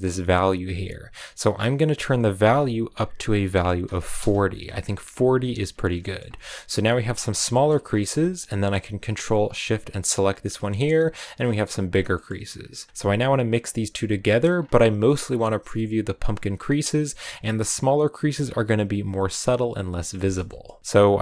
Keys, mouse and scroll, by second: 0.0-1.9 drag, 4.4-5.5 drag, 5.5 scroll down 3, 5.8 shift+middle click, 6.1 scroll up 2, 10.0 ctrl+shift+click, 12.1 middle click, 13.0-21.2 drag.